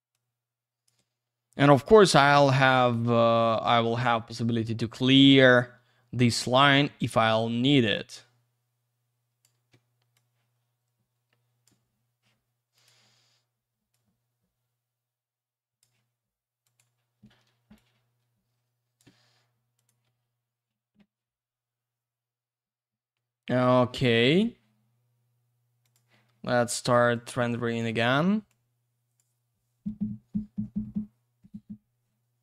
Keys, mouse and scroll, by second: 0.1 click, 1.8 w, 2.8 shift+click, 5.3 click, 6.6 click, 10.1 shift+click, 12.7 click, 13.9 click, 16.6 click, 17.7 shift+click, 19.7 click, 25.8 click, 27.1 click, 28.5 click.